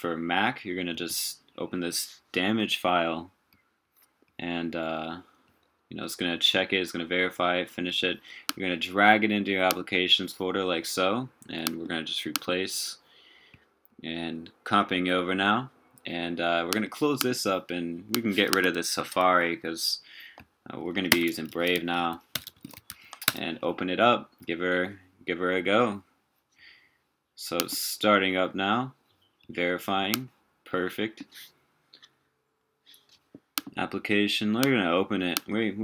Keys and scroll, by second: 19.2 ctrl+r, 21.1 super+space.